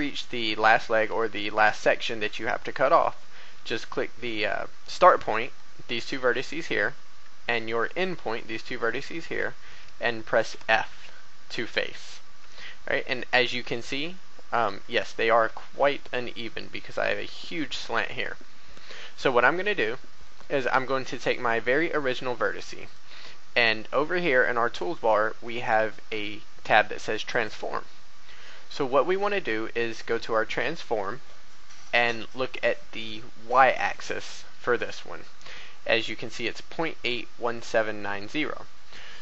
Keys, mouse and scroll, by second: 4.8 right click, 5.4 shift+right click, 7.7 shift+right click, 8.2 shift+right click, 10.4 f, 12.2 a, 13.2-13.6 scroll up 1, 14.1 shift+middle click, 20.2 right click, 22.8 click.